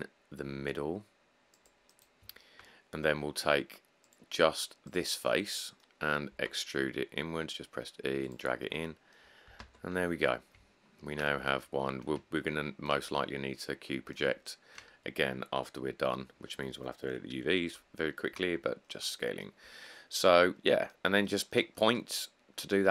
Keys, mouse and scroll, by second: 0.5 click, 5.5 shift+middle drag, 6.5 e, 9.8 Tab, 10.1-10.5 scroll.